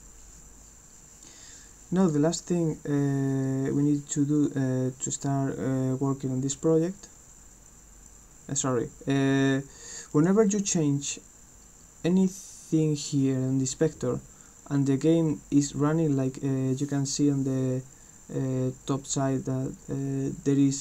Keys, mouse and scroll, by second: 2.0 click, 10.1 click.